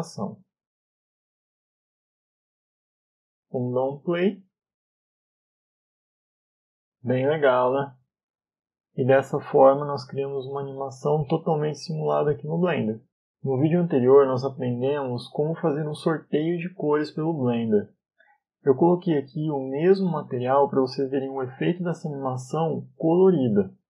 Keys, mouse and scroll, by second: 0.4 middle click, 1.3 KP_5, 1.8 scroll down 1, 2.1 KP_5, 2.5 middle click, 4.1 click, 14.4 middle click, 14.4 click.